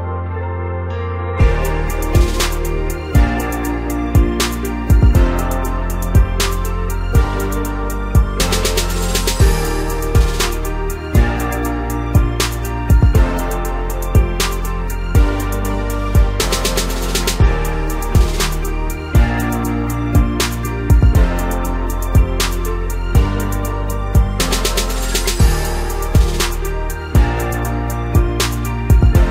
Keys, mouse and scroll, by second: 0.1 middle click, 0.8 click, 0.9-1.6 middle drag, 1.6 click, 1.8-2.4 scroll down 1, 2.4 KP_1, 2.9 click, 3.2 Tab, 4.3 click, 4.7 Tab, 4.9 scroll up 2, 5.1 scroll down 1, 5.3 Tab, 6.6-7.3 scroll up 3, 7.3 g, 9.8 Tab, 10.1-11.4 middle drag, 11.4 KP_1, 11.6 Tab, 11.9 scroll up 2, 12.1-12.4 scroll down 1, 12.4-13.7 middle drag, 13.7 alt+h, 14.6 scroll up 3, 14.7-15.1 scroll down 2, 15.1 KP_1, 15.5-17.1 scroll down 2, 17.1 u, 18.1 g, 19.2 a, 20.1 g, 21.3 Tab, 21.5 scroll down 2, 21.7 middle click, 22.3 click, 22.4 middle click, 23.3 scroll up 1, 23.4-23.8 middle drag, 23.8-25.0 drag, 25.0 scroll up 2, 25.1-25.9 scroll down 1, 25.9-27.6 scroll down 1, 27.6-28.1 drag, 28.6-29.0 scroll up 3, 29.0-29.3 scroll down 4.